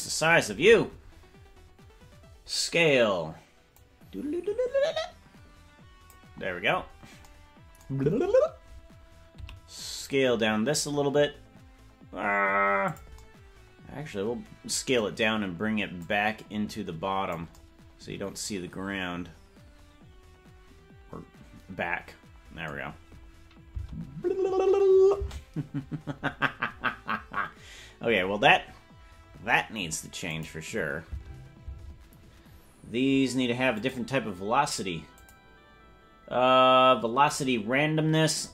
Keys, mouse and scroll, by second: 3.7-6.3 drag, 9.3 s, 16.0-17.4 drag, 25.2 space, 28.1-30.4 scroll up 11, 30.4 click, 30.4-30.7 scroll up 7, 31.0 space, 31.7 space, 33.7 click, 35.1 click, 37.2-38.5 drag.